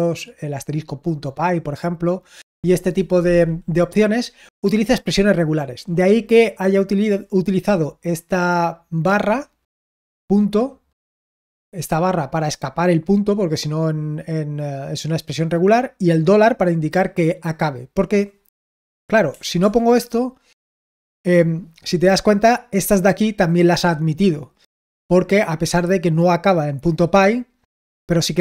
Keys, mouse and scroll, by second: 10.4 click, 11.5 click, 12.6 click, 16.7 click, 18.8 ctrl+p, 19.2 BackSpace, 19.6 Return, 23.5-24.8 drag.